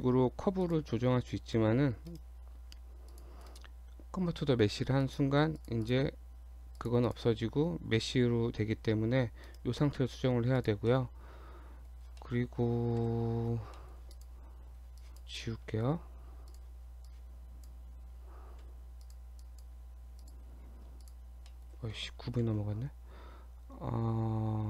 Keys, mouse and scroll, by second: 0.6 click, 1.5 g, 2.4 scroll down 2, 2.9 Tab, 3.1 click, 3.5 right click, 5.6 click, 5.8 click, 6.2 Tab, 6.8 click, 7.1 click, 7.4 scroll up 2, 8.7 g, 9.8-10.3 scroll down 5, 10.4 Tab, 10.6 click, 10.9 middle click, 12.2 middle click, 12.4 scroll down 1, 13.0 KP_7, 13.8 shift+middle click, 14.1 click, 14.7-15.0 scroll down 2, 15.0 click, 16.5 click, 17.1 click, 18.6 x, 19.5 click, 19.8 x, 20.7-21.0 scroll up 2, 21.1 shift+click, 21.5 shift+middle click, 22.4 shift+a.